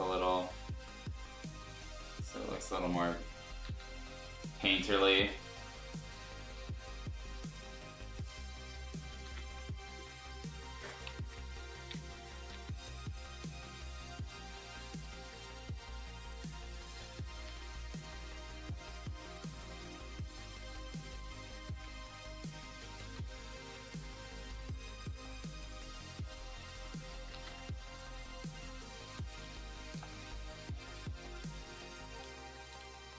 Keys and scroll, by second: 3.6 ctrl+z, 9.3 ctrl+z, 11.3 ], 11.5 ], 11.6 ], 11.9 [, 15.3 x, 17.4 ctrl+z, 21.8 x, 23.0 ctrl+z, 23.7 x, 26.8 ctrl+z, 27.1 ctrl+z, 27.3 ctrl+z, 29.0 space, 29.8 b.